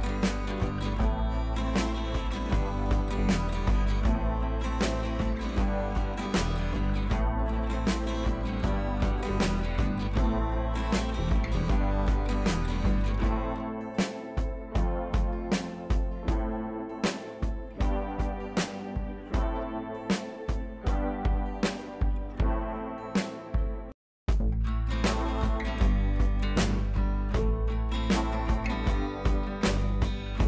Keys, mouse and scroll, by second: 3.7 click, 6.5 click, 10.6 ctrl+z, 11.7-18.5 drag, 18.8 scroll down 1, 19.7 click, 20.0 scroll up 1, 22.9 click, 23.5 b, 24.1-25.7 drag, 25.7 ctrl+z, 26.6 ctrl+shift+z, 27.1-30.4 drag.